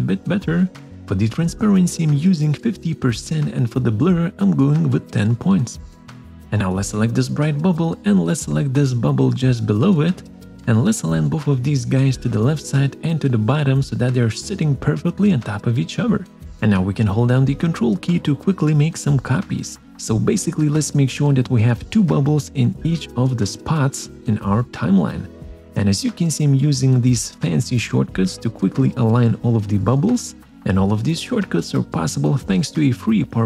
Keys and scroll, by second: 20.7 ctrl+Right, 21.0 ctrl+Down, 25.2 ctrl+Right, 25.2 ctrl+Up, 29.3 ctrl+Right, 29.4 ctrl+Down.